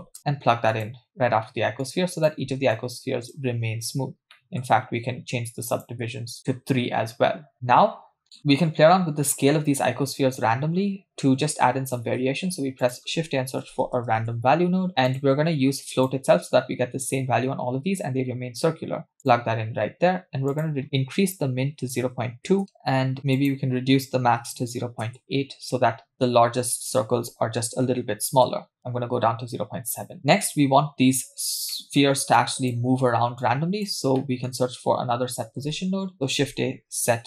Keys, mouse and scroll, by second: 1.8-2.3 drag, 2.8 click, 4.3 middle click, 4.7-5.5 scroll up 1, 5.5 scroll up 2, 5.7 click, 7.0-7.5 scroll up 3, 7.5 middle click, 7.5-9.6 scroll down 7, 12.0 shift+a, 19.2-19.7 drag, 20.5-22.6 drag, 22.6 scroll down 3, 22.8-23.4 scroll up 2, 23.4-25.5 drag, 26.8-28.8 drag, 30.1 scroll down 1, 30.2-30.6 scroll up 1, 30.6 scroll down 2, 31.7 scroll down 2, 31.7 middle click, 32.0-32.4 scroll up 1, 32.4-32.8 drag, 33.4 click, 34.2 middle click, 35.6 shift+a.